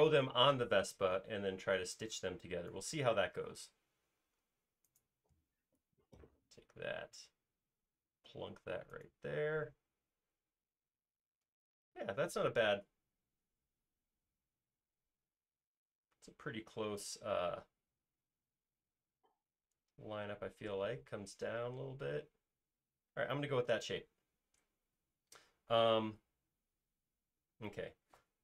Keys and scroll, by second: 3.6 m, 24.2 space.